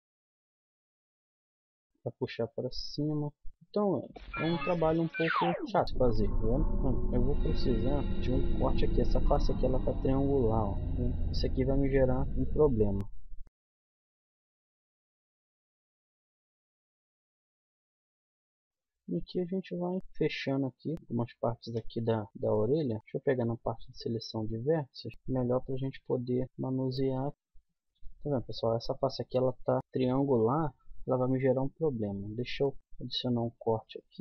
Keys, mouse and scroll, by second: 0.0 middle click, 0.6 middle click, 1.8-4.2 middle drag, 5.0 middle click, 5.2-8.0 middle drag, 8.7-10.7 middle drag, 11.0 middle click, 11.4 scroll down 1, 11.4 middle click, 12.2 KP_1, 12.4 z, 13.4 z, 13.7 z, 14.4 click, 14.9 middle click, 15.6 click, 15.9-17.6 middle drag, 17.8 middle click, 18.6 right click, 18.7 click, 19.1 middle click, 19.7 right click, 19.7 click, 20.1 middle click, 20.8 click, 20.9-23.0 middle drag, 23.0 click, 23.3-24.9 middle drag, 25.6 g, 26.4 g, 27.3 g, 31.2 k.